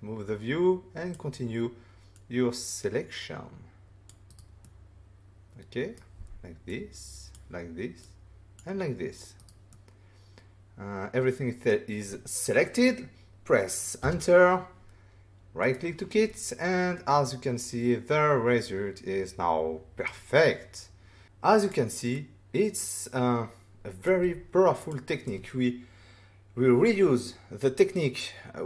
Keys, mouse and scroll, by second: 2.1 click, 4.2 right click, 4.6 middle click, 6.7 click, 8.0 click, 9.3 right click, 9.7 middle click, 14.0 Return, 15.6 right click, 16.3 middle click, 21.2 f, 21.6 click, 22.1 middle click, 24.7 click.